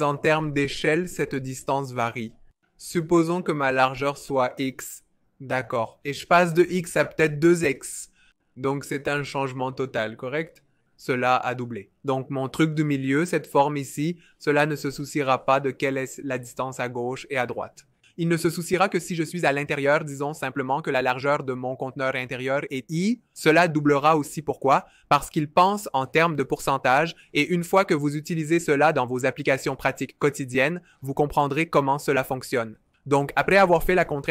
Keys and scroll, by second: 1.0 r, 2.2 super+c, 2.7 typing, 27.3 v.